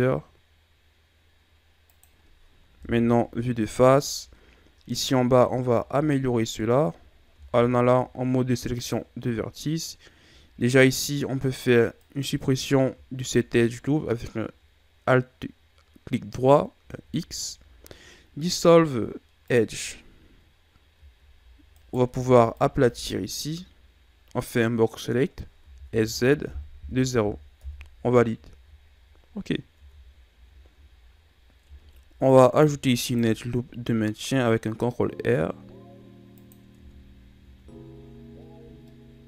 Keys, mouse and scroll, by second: 2.8 KP_1, 4.0-5.3 shift+scroll down 7, 5.3-6.1 scroll up 5, 6.1-6.4 shift+scroll down 3, 6.4-6.8 scroll up 2, 7.4 ctrl+Tab, 10.9 alt+right click, 12.0 alt+right click, 16.8 x, 21.0 z, 21.8 right click, 22.2 b, 25.7 s, 28.5 z, 29.4-29.8 scroll down 3, 29.8 Tab, 30.2-30.7 scroll down 1, 30.7-31.3 shift+scroll up 5, 31.7 Tab, 32.7 ctrl+r, 36.8 Tab, 37.5 a, 37.7-38.4 scroll down 6, 38.4-38.9 scroll up 6, 38.9-39.2 middle drag.